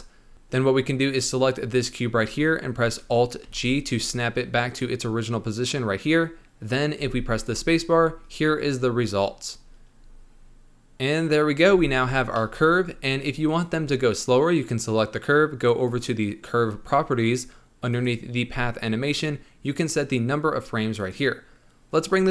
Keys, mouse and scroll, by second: 0.3-2.3 scroll up 1, 3.4 alt+g, 6.9 space, 9.4 scroll down 1, 11.6 space, 12.3-13.4 middle drag, 13.4 click, 15.8 click, 17.8-22.3 drag.